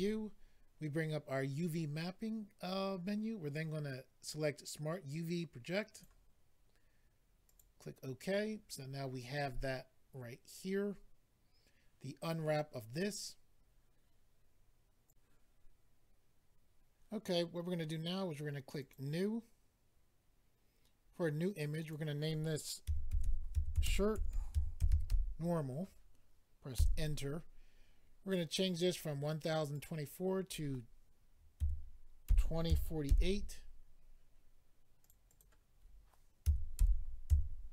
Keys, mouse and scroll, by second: 5.9 click, 6.0 click, 7.4 click, 7.5 click, 15.1 click, 18.8 click, 18.9 click, 21.8 click, 22.8-24.9 typing, 26.2 typing, 26.7 Return, 29.7 click, 29.8 click, 31.5-32.9 typing, 34.3 typing, 35.0 click, 35.1 click, 35.2 click, 35.4 double click, 36.4-36.7 typing.